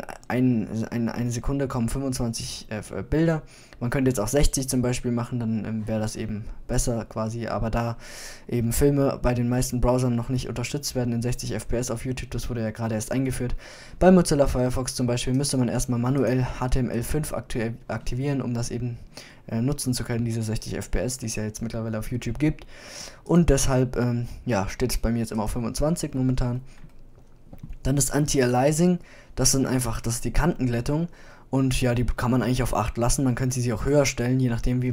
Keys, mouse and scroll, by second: 6.2 click, 6.3-7.9 middle drag, 7.9 click, 14.8 middle click, 14.9-18.1 drag.